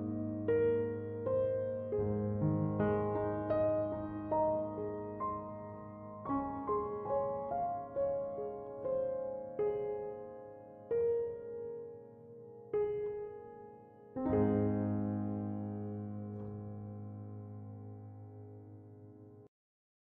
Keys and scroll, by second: 7.5 ctrl+1.